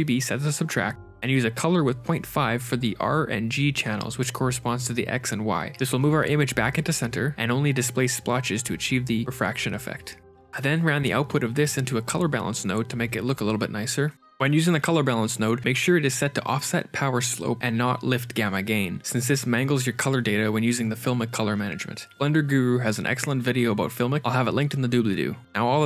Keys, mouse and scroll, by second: 9.7 click, 10.2 middle click, 12.2 shift+a, 14.7 click, 17.4 click, 19.6 shift+click, 21.8 shift+click, 23.1 ctrl+shift+click.